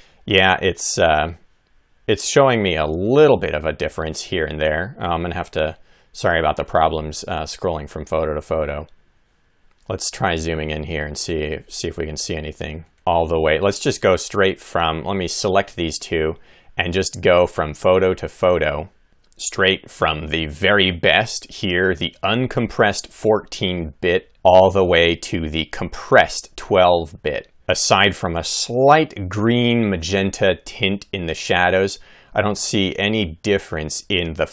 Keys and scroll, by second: 4.2 Left, 8.0 Right, 12.8 Left, 24.3 Left, 27.4 Right, 32.7 Left.